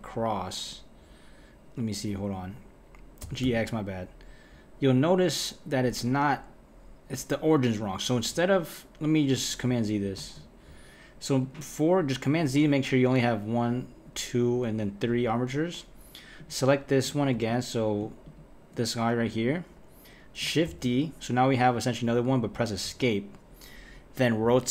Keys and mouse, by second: 3.2 g, 10.2 z, 11.4 click, 16.4 click, 17.5 click, 18.2 shift+click, 20.7 shift+d, 24.4 r.